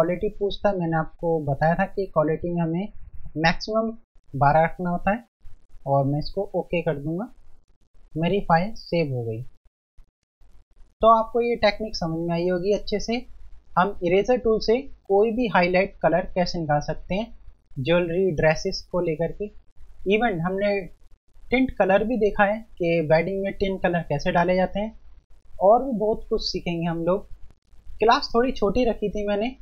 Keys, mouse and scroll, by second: 0.9 click, 6.6 click.